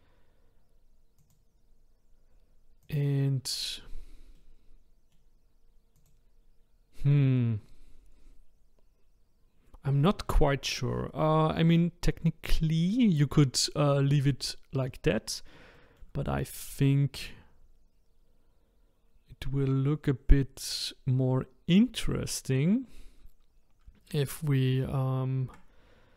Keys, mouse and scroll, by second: 1.2 click, 2.8 click, 4.4-6.0 middle drag, 6.0 click, 6.7-10.2 scroll up 2, 15.2-15.7 scroll down 2, 15.7-16.5 shift+middle drag, 16.5-17.7 scroll up 2.